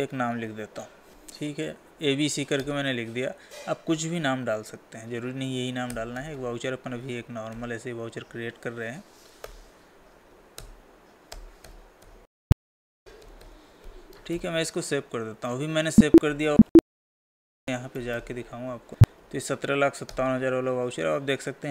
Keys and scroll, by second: 1.1 space, 10.7 Down, 14.3 ctrl+a, 16.5 Escape, 17.5 Escape, 19.1 Up, 19.7 Down.